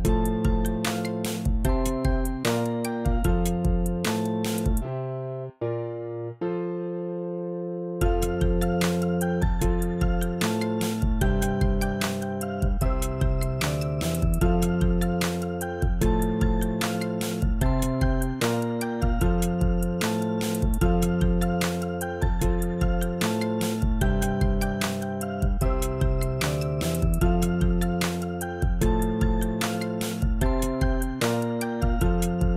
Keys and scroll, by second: 31.9 2.